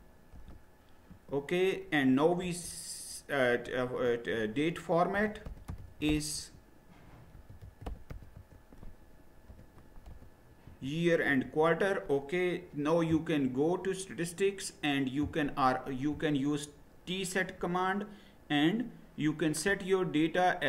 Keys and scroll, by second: 0.0-0.3 typing, 1.1 Return, 2.2-3.9 typing, 4.9-10.7 typing, 11.2 Return.